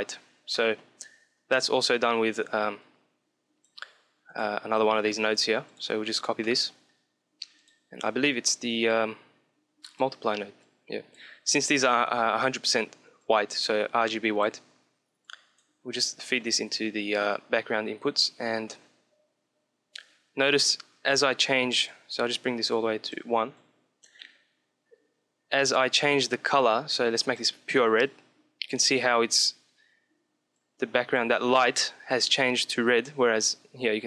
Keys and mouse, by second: 2.3-5.8 drag, 5.2 shift+d, 6.0-7.5 middle drag, 7.5-9.0 drag, 10.5-12.1 drag, 13.1 click, 15.2-16.3 drag, 16.3 middle click, 17.1-22.2 drag, 25.6-27.5 drag, 30.5-32.3 drag.